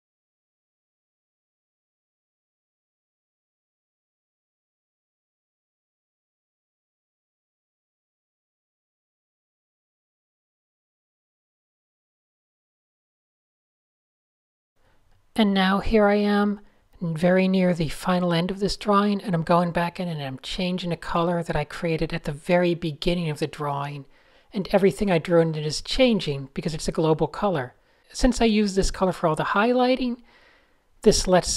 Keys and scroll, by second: 0.4 alt+shift+super+r, 3.8 super+z, 5.2 super+z, 7.1 super+s, 7.7 super+0, 7.8 Tab, 8.3 shift+super+z, 13.8 Tab, 21.0 Tab, 23.8 Tab, 25.4 super+z, 28.5 Tab, 28.9 Tab, 30.3 super+a, 30.4 super+a, 31.0 super+a.